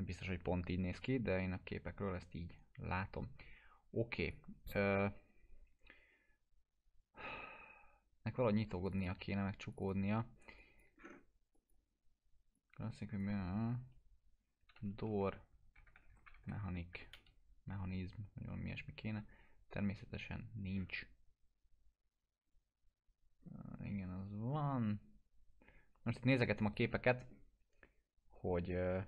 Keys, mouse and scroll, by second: 4.2 alt+middle click, 4.2 click, 8.9 click, 11.0 scroll up 1, 11.5-13.5 drag, 14.5-16.9 typing, 17.1 Return, 19.1-19.6 scroll down 1, 26.3-26.9 click, 27.3 scroll down 1.